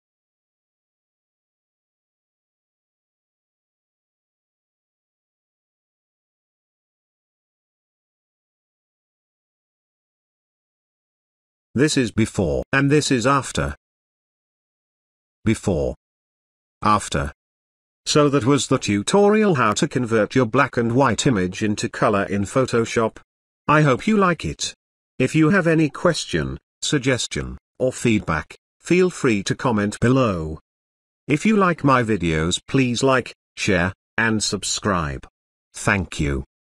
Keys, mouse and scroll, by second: 0.4-1.6 ctrl+drag, 11.7 alt+click, 11.7 alt+click, 15.2 alt+click, 18.0 space, 18.4-19.9 ctrl+drag, 26.2 space, 26.4-27.0 ctrl+drag, 32.4 space, 32.6-33.5 ctrl+drag.